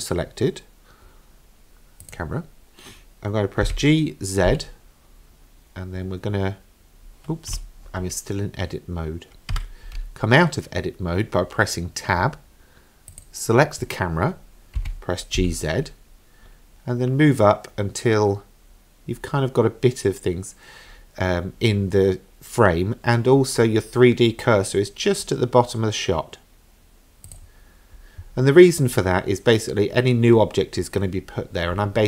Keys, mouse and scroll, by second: 2.0 click, 3.7 g, 9.5 Tab, 13.1 click, 14.8 g.